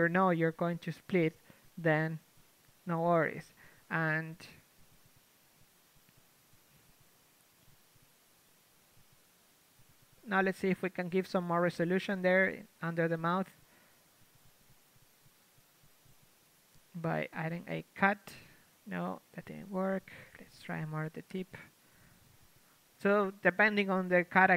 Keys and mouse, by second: 0.1 a, 0.5-1.9 drag, 0.5 r, 3.8 a, 4.5 KP_3, 5.1 Tab, 7.1 Tab, 8.1 a, 9.6 ctrl+Tab, 9.7 a, 11.5 right click, 13.3 ctrl+e, 13.5 a, 14.1 ctrl+Tab, 14.6 l, 15.5 u, 17.8 KP_3, 18.3 Tab, 21.8 KP_1, 22.6 Tab, 23.0 Tab, 23.6 Tab, 24.0 Tab.